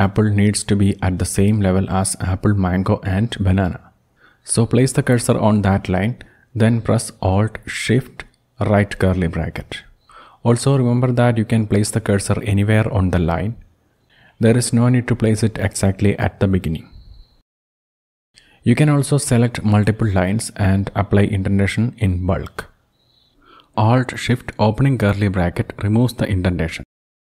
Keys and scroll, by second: 2.1 Down, 2.3 Down, 2.5 Down, 2.9 Down, 9.9 alt+shift+}, 11.3 Down, 12.7 alt+shift+}, 15.1 Down, 15.3 Down, 16.4 alt+shift+}, 17.3 Down, 17.5 alt+shift+}, 18.7 Down, 19.0 alt+shift+}, 21.1 shift+Up, 21.3 shift+Up, 23.0 alt+shift+}, 24.8 alt+shift+{, 25.0 alt+shift+{, 26.0 alt+shift+}.